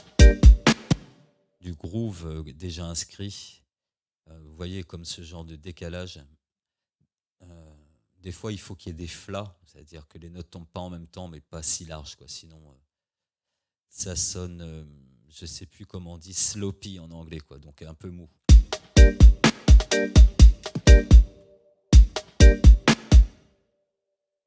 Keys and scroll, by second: 0.9 space, 18.4 space, 21.2 space, 23.2 space.